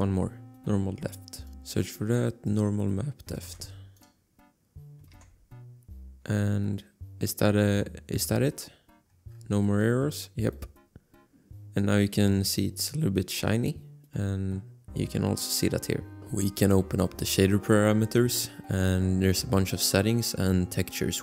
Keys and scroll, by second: 0.6 ctrl+c, 1.5 ctrl+v, 3.6 ctrl+c, 5.3 ctrl+v.